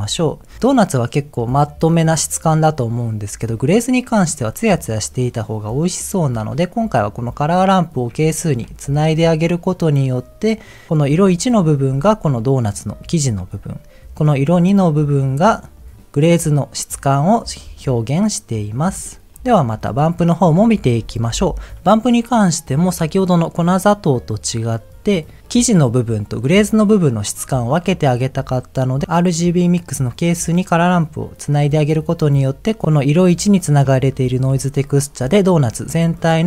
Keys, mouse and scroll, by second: 0.6-1.4 scroll down 3, 1.4-2.7 middle drag, 2.9-3.6 scroll up 2, 4.2-5.4 middle drag, 7.5 ctrl+shift+click, 8.8 ctrl+shift+click, 10.9 ctrl+shift+click, 12.2-12.6 middle drag, 14.6 click, 19.3 scroll down 2, 19.3 shift+middle click, 20.3 click, 21.3 m, 22.9 click, 25.2 click, 32.9 ctrl+shift+click, 34.1 ctrl+shift+click.